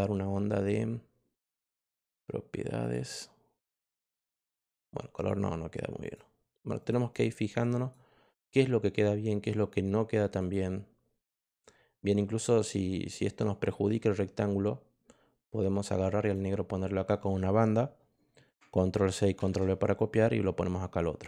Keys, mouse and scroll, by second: 1.4 click, 2.7 click, 3.8 click, 5.1 click, 6.0 click, 6.7 click, 7.0 click, 7.7 click, 10.3 click, 13.6-16.3 drag, 19.0 ctrl+c, 19.3 ctrl+v, 19.9 click.